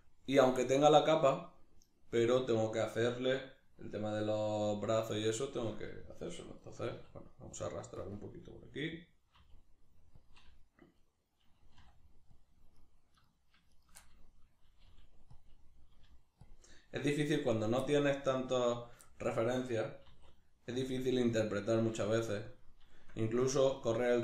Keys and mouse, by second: 4.7-8.1 middle drag, 6.9 e, 8.1 click, 8.1-10.3 middle drag, 9.3 e, 10.3 click, 10.4-12.5 middle drag, 11.8 r, 12.5 click, 12.7 right click, 13.1 right click, 13.7 shift+right click, 14.0-15.4 middle drag, 14.9 g, 15.4 click, 15.5 middle click, 16.1 g, 16.5 click, 16.6 middle click, 17.5 right click, 17.9 middle click, 18.4 right click, 18.7 shift+right click, 19.1-20.1 middle drag, 20.1 e, 20.9 click, 20.9-22.1 middle drag, 22.1 g, 22.6 click, 22.9-24.2 shift+middle drag.